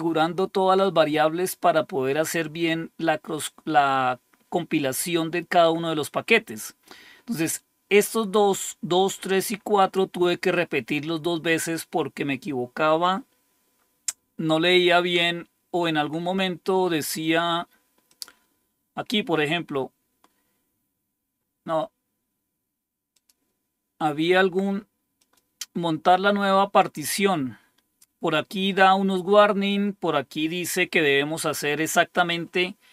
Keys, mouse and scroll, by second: 6.4-7.1 scroll down 1, 18.0 click, 19.8-23.1 scroll down 1, 23.1 click, 25.1 click, 26.9-28.8 scroll down 4, 29.4-30.2 scroll down 2.